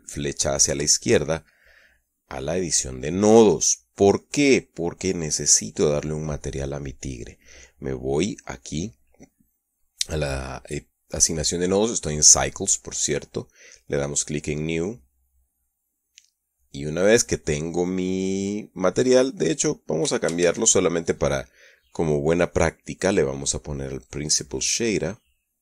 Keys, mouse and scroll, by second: 1.2 ctrl+Left, 3.9 middle click, 6.1 click, 15.3 click, 16.5-17.8 middle drag, 17.9 middle click, 19.5 right click, 20.5 x, 20.9 shift+a, 25.5 click.